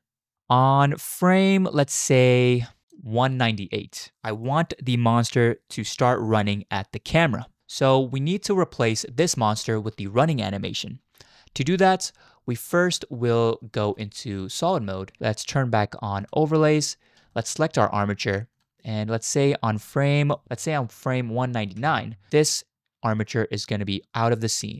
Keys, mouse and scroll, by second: 0.3 space, 1.0 click, 2.5 click, 13.9 z, 16.2 click, 17.3 shift+drag, 20.0 shift+click, 20.4 Right, 20.4 Left, 21.8 Right.